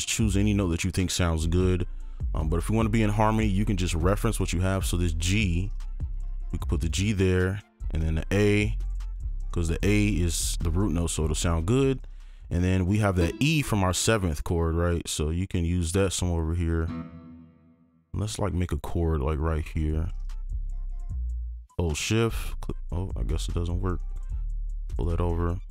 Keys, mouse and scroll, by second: 0.1 click, 3.5-5.2 scroll up 1, 5.2-5.7 scroll down 1, 5.7 ctrl+click, 8.2-8.8 scroll down 1, 8.8 ctrl+click, 14.3 right click, 15.2-15.8 scroll down 1, 18.3-20.4 scroll up 1, 22.0 shift+click, 23.5 right click, 23.5 shift+click.